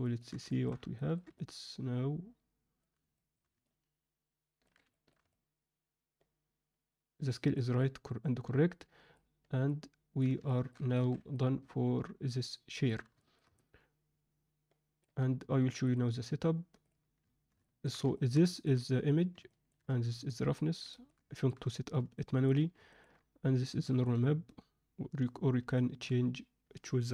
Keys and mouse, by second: 0.0 ctrl+alt+middle click, 0.5 alt+shift+middle drag, 0.9 ctrl+middle drag, 1.3-2.7 middle drag, 3.1 shift+middle drag, 3.6-4.6 ctrl+alt+middle drag, 4.9 shift+middle click, 5.3-7.5 middle drag, 7.7-8.7 middle drag, 9.6-10.1 alt+middle drag, 10.4 ctrl+middle click, 10.9 alt+a, 11.3-12.8 middle drag, 13.1 alt+shift+middle drag, 13.5-15.0 alt+middle drag, 15.8-16.9 drag.